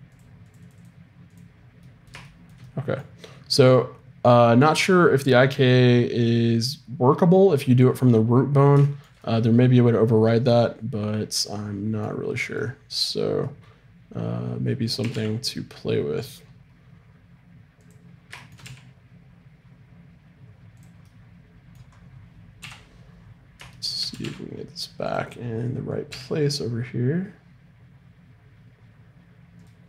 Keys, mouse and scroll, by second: 3.7-7.2 middle drag, 8.3-11.0 middle drag, 12.4-14.3 right drag, 13.4 click, 14.1 middle click, 15.0 g, 18.6 g, 22.6 KP_3, 24.1 g, 26.1 g.